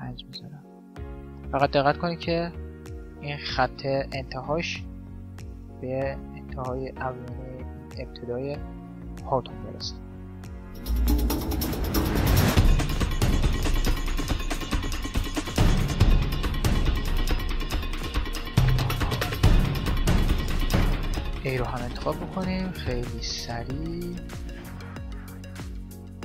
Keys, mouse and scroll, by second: 1.0 z, 3.4-5.1 drag, 5.3-7.2 drag, 7.0-8.6 middle drag, 8.9-10.6 drag, 11.1-12.4 drag, 11.4 middle click, 11.8 z, 12.2 right click, 13.7 click, 13.7 right click, 14.3-15.8 drag, 16.4-17.8 drag, 16.9 z, 17.4 right click, 18.1 middle click, 18.4 click, 18.4 right click, 18.5 z, 19.2-20.6 drag, 22.2-24.7 drag, 24.7 middle click, 25.4 right click.